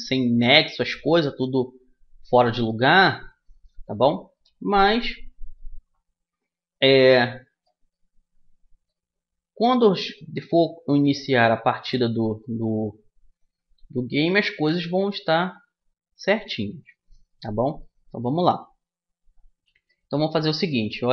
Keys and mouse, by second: 0.9 middle click, 2.4 middle click, 4.0-5.2 middle drag, 5.2-7.2 drag, 5.2 right click, 7.6 middle click, 9.5-11.6 middle drag, 11.6 click, 12.7 click, 13.1-16.3 drag, 14.5 right click, 16.3-20.3 middle drag, 20.3 right click.